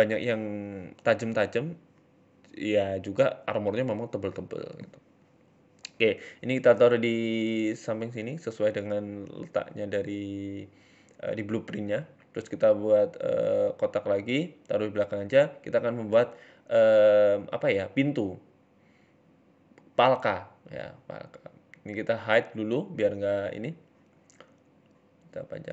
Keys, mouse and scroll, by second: 0.6 e, 1.1 s, 2.2 Tab, 2.3-3.3 scroll down 7, 2.4 middle click, 2.8 middle click, 3.3 KP_7, 4.0 g, 5.4 scroll up 2, 5.7 shift+middle click, 5.9 scroll down 1, 7.4 shift+middle click, 7.5 scroll down 1, 8.5 middle click, 9.0-9.4 scroll down 3, 9.1 shift+middle click, 9.4-10.2 scroll up 3, 9.6 shift+middle click, 10.2 shift+a, 11.8-12.9 scroll down 3, 12.2 KP_7, 12.9 g, 14.9-15.6 scroll up 9, 15.2 shift+middle click, 15.6-16.4 scroll down 8, 16.3 middle click, 16.6 s, 18.1 middle click, 18.1-18.6 scroll up 4, 18.6 s, 19.3 Tab, 19.5 middle click, 20.0 KP_1, 20.5 click, 21.4 h, 21.7 middle click, 22.0 scroll down 2, 22.2-22.9 scroll up 1, 22.9 middle click, 24.1 Tab, 24.5 s.